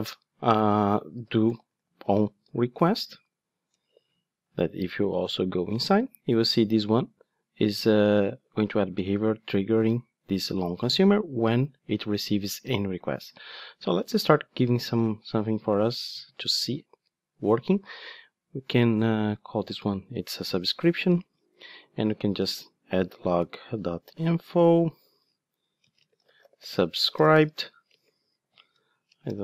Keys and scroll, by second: 3.8 Return, 5.2 super+b, 14.1 ctrl+Tab, 20.4 Return.